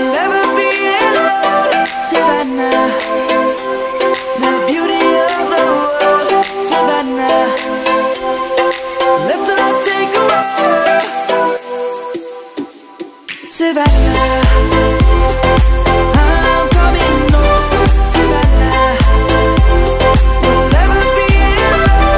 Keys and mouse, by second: 1.1 click, 4.4 Tab, 5.0 click, 5.6 middle click, 7.1 click, 7.3 Tab, 7.9 click, 12.9 ctrl+z, 15.6 ctrl+z, 16.2 ctrl+z, 17.8 click, 18.9 middle click, 20.4 shift+click, 20.8 shift+click, 21.7 shift+click.